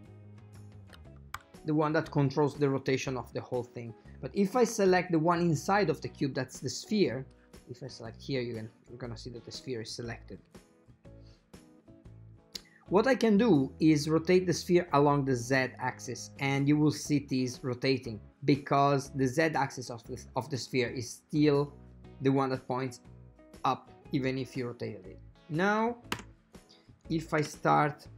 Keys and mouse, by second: 15.4-21.8 drag, 25.4 click, 26.3 space, 27.6 space.